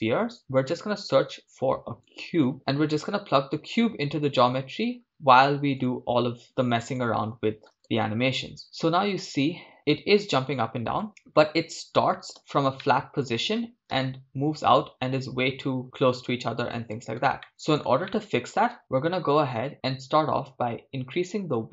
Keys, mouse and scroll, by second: 1.1 shift+a, 3.1-6.0 drag, 6.5 click, 8.6-12.3 middle drag, 12.4 click, 12.4 shift+space, 12.9-13.9 shift+middle drag, 13.9 shift+space, 16.9 shift+space, 17.4-18.5 middle drag, 21.2-21.7 drag.